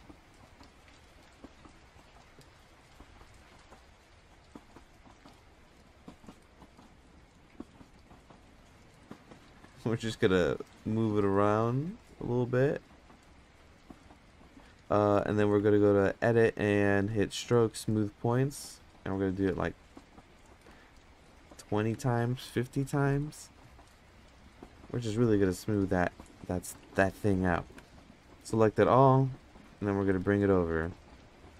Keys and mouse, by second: 4.6 click, 4.6 f, 5.9 click, 7.3 click, 8.4 click, 9.4 click, 10.8 click, 11.8 click, 12.5 click, 13.7 click, 15.1 Tab, 17.0-17.8 drag, 18.8 click, 19.6 click, 21.9-24.1 drag, 24.9 Tab, 26.7 Tab, 27.8 a, 29.3 click, 29.7-30.0 drag, 30.1-30.8 middle drag.